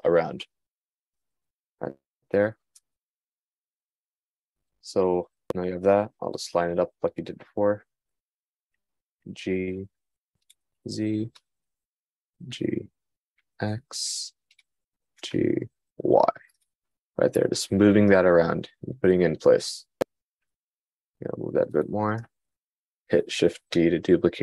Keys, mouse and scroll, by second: 24.3 shift+d.